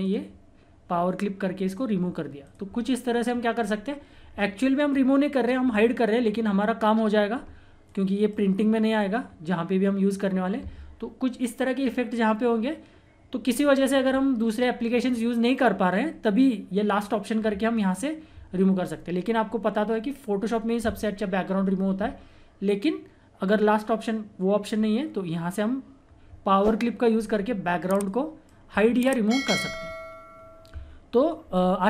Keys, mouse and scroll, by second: 0.0 click, 2.0-2.4 scroll down 1, 2.4 click, 7.8 click, 8.8 scroll up 1, 9.8 click, 12.5 scroll down 1, 17.7-19.5 scroll up 1, 26.0 scroll down 1, 27.2-27.9 scroll up 1, 28.0-29.8 drag, 29.8-30.3 scroll down 1, 31.3 click.